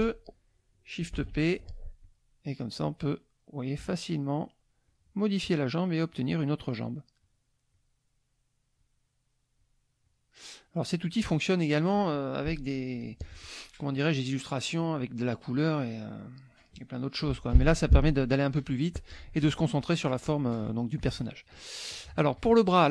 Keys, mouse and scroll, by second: 1.1 shift+p, 2.0 click, 2.8 click, 3.8 click, 4.4 click, 4.8 click, 5.4 click, 6.1 click, 7.2 click, 7.7 click, 8.8 click, 9.6 click, 10.0 click, 10.8 click, 15.9 click, 17.4 middle click, 18.4 middle click, 21.0 click, 21.9-22.9 drag.